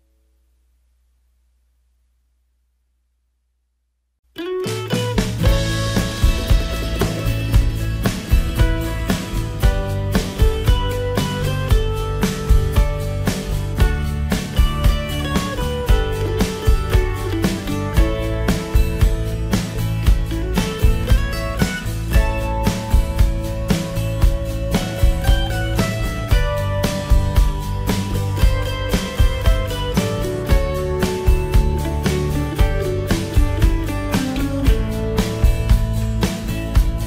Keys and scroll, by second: 1.9 ctrl+j.